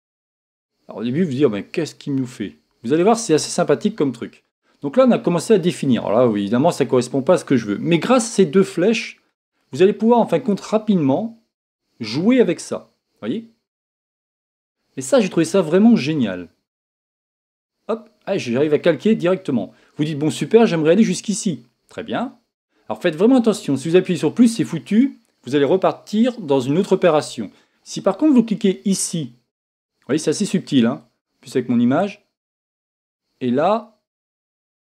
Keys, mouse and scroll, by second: 8.8-10.6 drag, 12.0-15.6 drag, 17.0-18.5 drag, 31.5 click.